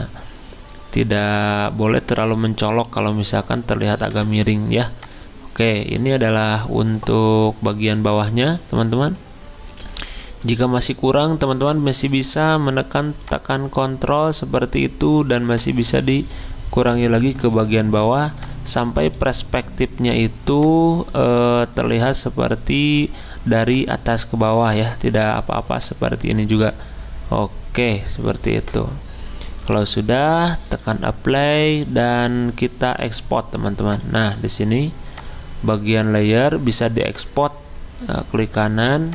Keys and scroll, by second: 4.1 Return.